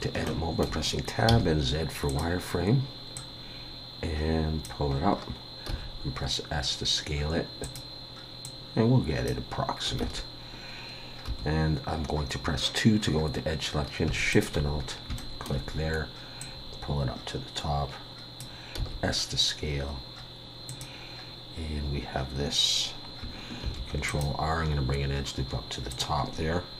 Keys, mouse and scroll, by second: 0.2 shift+middle click, 1.3 z, 3.1 click, 4.9-5.7 scroll up 2, 5.7 s, 8.4 click, 10.0 alt+a, 11.3 2, 14.3 alt+shift+click, 14.8-15.2 scroll down 2, 15.2 shift+middle click, 16.4 click, 18.8 s, 23.6 ctrl+r.